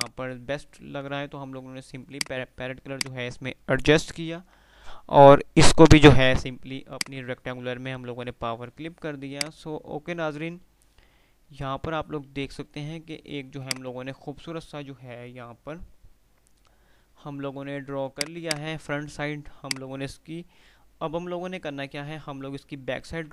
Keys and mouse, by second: 0.0 click, 0.3-0.9 F2, 2.3 click, 4.6 o, 6.9 click, 8.0 F3, 9.6 click, 9.9 F3, 11.2 F2, 13.5 click, 13.7-14.5 F2, 18.3 click.